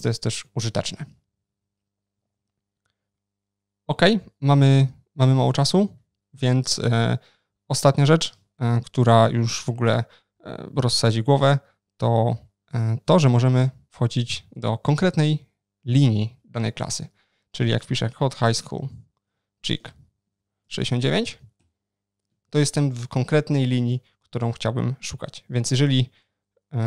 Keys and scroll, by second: 2.2 super+1, 12.5 ctrl+shift+n, 25.9 ctrl+shift+n, 25.9 shift+super+o.